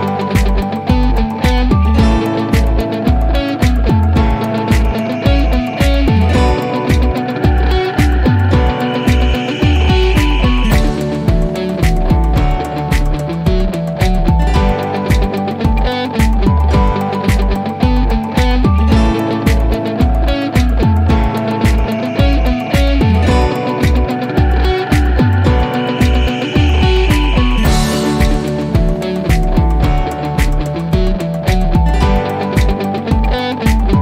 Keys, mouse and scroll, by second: 2.9-3.4 drag, 9.7 c, 12.0-12.5 drag, 13.8 4, 14.6 Return, 17.2 click, 20.9 click, 25.7-26.0 typing, 27.7 typing, 28.1 click, 31.5 click.